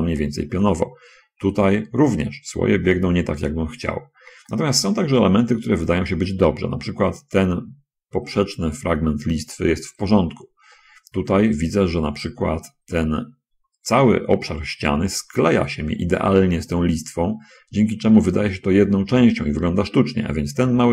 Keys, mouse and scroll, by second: 0.6-2.3 middle drag, 4.9 middle click, 6.1 middle click, 10.7-11.1 scroll up 1, 11.1-12.2 middle drag.